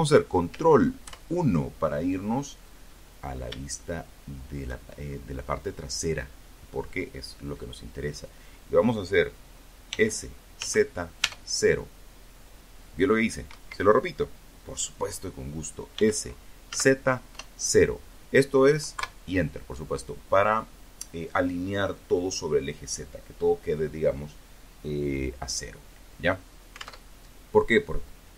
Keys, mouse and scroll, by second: 0.9-1.3 scroll down 2, 1.9 shift+middle click, 3.0-3.8 shift+scroll up 3, 8.1 s, 8.7 z, 11.7 Escape, 14.1 s, 14.9 z, 15.5 KP_0, 17.1 KP_Enter, 25.1 alt+Tab, 27.9 alt+Tab.